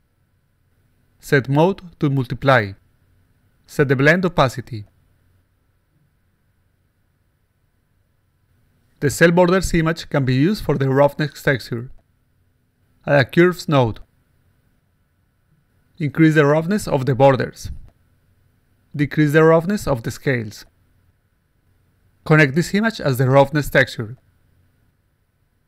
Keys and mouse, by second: 0.9 click, 1.7 click, 2.3 click, 3.3 click, 4.1 click, 6.7 click, 7.6 click, 8.5 click, 12.8 click, 14.0-15.5 drag, 16.7-18.1 drag, 19.4-21.3 drag, 22.7-24.1 drag, 24.9 click.